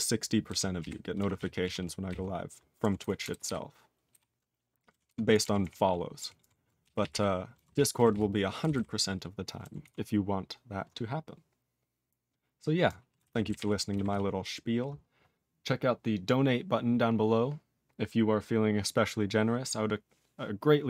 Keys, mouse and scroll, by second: 0.4 ctrl+n, 0.7 ctrl+p, 1.3 ctrl+s, 1.6 ctrl+p, 2.0 ctrl+n, 2.9 ctrl+s, 3.2 ctrl+alt+b, 3.4 ctrl+alt+b, 4.9 ctrl+alt+b, 5.0 ctrl+s, 5.4 ctrl+alt+f, 5.6 ctrl+alt+f, 7.5 ctrl+e, 7.7 ctrl+s, 7.9 ctrl+p, 8.1 ctrl+p, 8.6 ctrl+n, 8.7 ctrl+n, 9.8 ctrl+s, 13.1 ctrl+space, 13.2 ctrl+a, 13.4 ctrl+g, 13.5 ctrl+e, 14.1 ctrl+s.